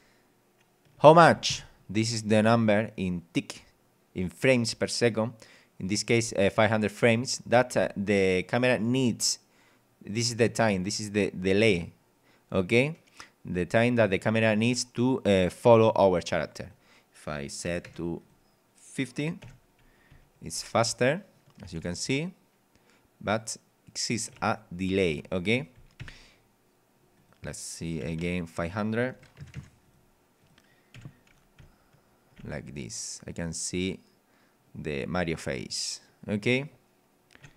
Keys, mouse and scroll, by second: 1.0 a, 1.5 Escape, 16.6 click, 17.7 KP_5, 17.9 KP_0, 18.2 click, 19.4 p, 20.1 w, 20.6 d, 22.0 a, 24.4 d, 26.0 Escape, 27.1 click, 28.0 KP_5, 29.1 BackSpace, 29.4 KP_0, 29.9 click, 30.4 click, 30.9 p, 31.5 w, 32.3 d.